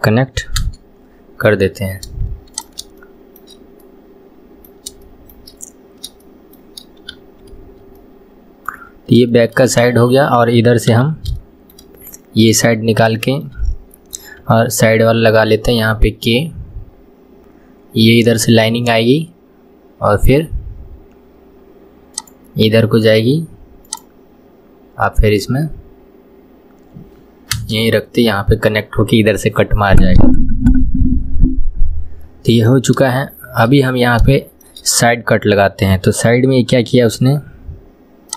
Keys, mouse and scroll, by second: 1.1-1.9 scroll down 1, 1.9-2.6 scroll down 1, 2.6 click, 3.0-7.1 shift+middle drag, 7.1 KP_1, 8.0-10.9 middle drag, 10.9 KP_3, 11.4-12.9 shift+middle drag, 12.9-13.2 scroll down 1, 13.2-14.4 shift+middle drag, 14.4 k, 33.3-36.9 shift+middle drag, 36.9 k.